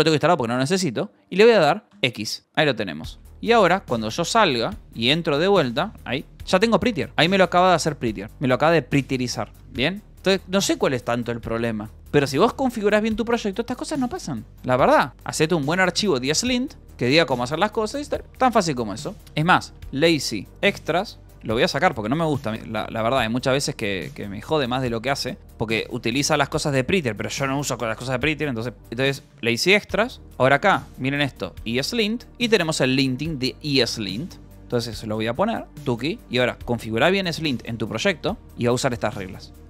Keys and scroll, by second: 0.0-0.7 typing, 1.8 c, 2.4 x, 3.1 q, 3.6 Return, 4.6-6.7 typing, 5.2 Return, 5.9 Return, 7.1 ctrl+s, 9.6 k, 10.1 j, 10.6 k, 12.4 shift+;, 14.0 Return, 14.5 k, 15.2 space, 15.7 e, 16.8 n, 17.3 Return, 18.0-19.9 typing, 18.3 Return, 20.5 Return, 21.6-25.4 typing, 25.2 Escape, 29.4 Return, 30.2-33.4 typing, 35.3-39.1 typing.